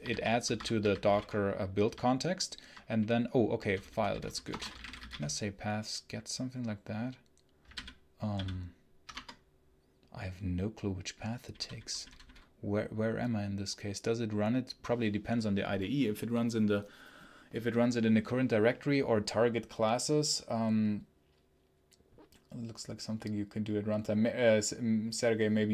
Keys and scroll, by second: 0.0-1.2 typing, 0.0 ctrl+v, 4.2-5.4 typing, 7.6 Down, 8.2 Up, 9.0 Return.